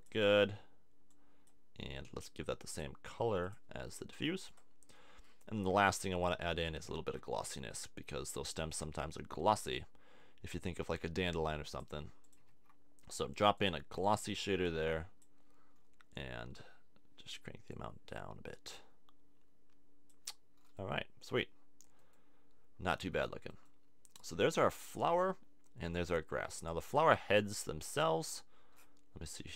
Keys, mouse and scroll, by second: 4.6 middle click, 6.9 shift+a, 12.5 shift+a, 20.5 middle click, 26.5-29.5 drag.